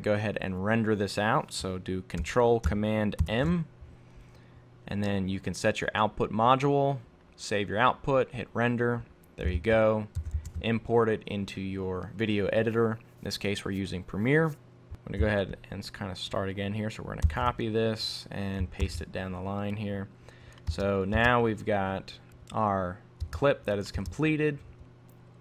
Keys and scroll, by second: 3.3 ctrl+super+m, 9.6 super+Tab, 17.3 super+c, 18.8 super+v.